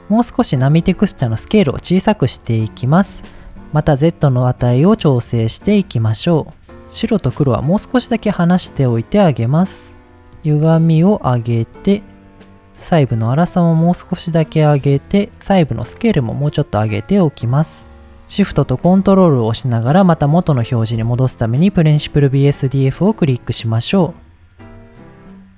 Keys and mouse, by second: 0.9-3.0 shift+drag, 3.7-7.3 shift+drag, 7.7 click, 8.9 click, 9.7 click, 10.4-11.8 drag, 12.8-14.7 drag, 15.5-18.1 drag, 18.7 middle click, 22.6 middle click.